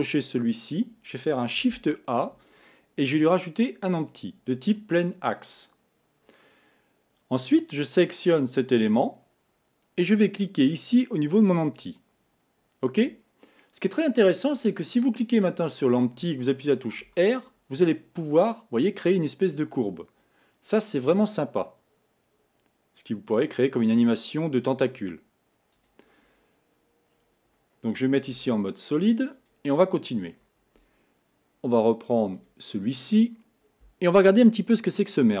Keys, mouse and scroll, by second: 1.7 shift+a, 8.3 click, 10.1-13.1 drag, 14.5 click, 17.4 r, 26.4-27.2 scroll up 3, 27.2-28.4 scroll down 2, 28.4 z, 32.4 click.